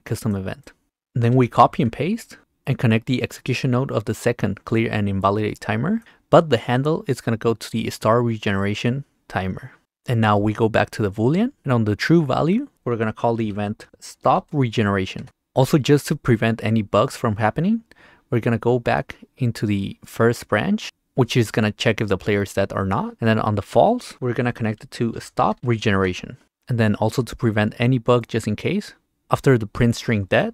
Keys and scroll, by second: 1.8 ctrl+c, 1.9 v, 13.6-15.0 typing, 15.2 Return, 24.9-26.1 typing.